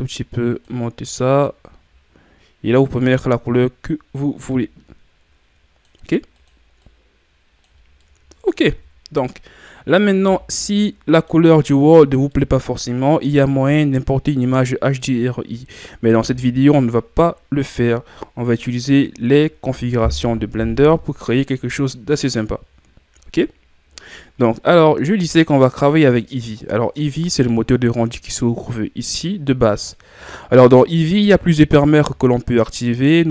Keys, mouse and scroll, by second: 8.0-10.2 middle drag, 10.2 a, 10.7-20.8 middle drag, 20.8 KP_1, 32.8-33.3 middle drag.